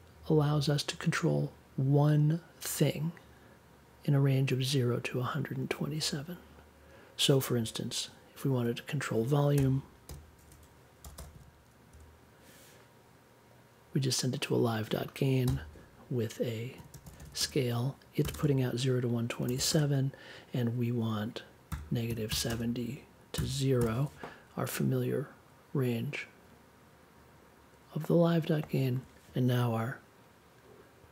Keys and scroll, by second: 9.5-11.9 typing, 15.4 n, 16.7-18.3 typing, 19.3 1, 19.7 space, 21.6 -, 22.0 7, 22.4 space, 23.3 0, 23.7 super+j.